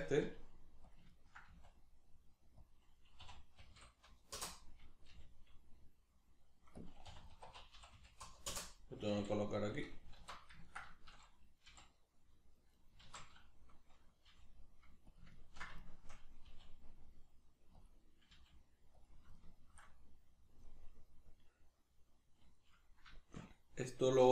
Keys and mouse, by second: 0.2 g, 1.0 click, 1.1-2.7 ctrl+middle drag, 1.5 s, 2.7 click, 3.2 r, 6.8 click, 7.1 r, 9.8 click, 10.2 alt+q, 10.6-12.8 ctrl+shift+middle drag, 11.6 g, 12.8 right click, 13.0 alt+q, 14.3 g, 15.2 click, 15.4-17.9 ctrl+middle drag, 16.5 g, 17.9 click, 18.4 g, 19.1 click, 19.4-24.3 shift+middle drag.